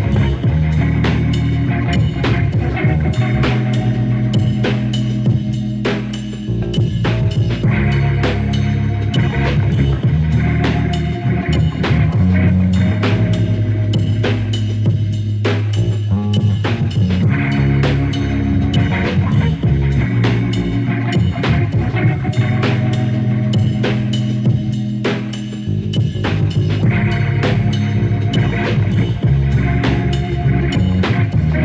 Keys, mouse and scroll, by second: 5.2-5.9 scroll down 1, 5.9-7.0 drag, 7.0 middle click, 8.9 drag, 10.1-17.9 drag, 19.5 click, 21.2 click, 21.3-22.6 middle drag, 22.6 ctrl+s, 24.8-25.8 middle drag, 26.5-27.5 scroll down 3, 27.5 drag, 27.7 click, 28.4 KP_0.